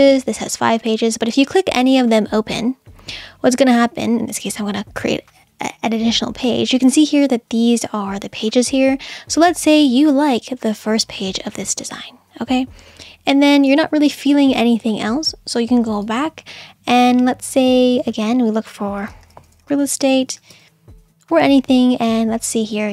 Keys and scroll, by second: 18.9-20.9 typing.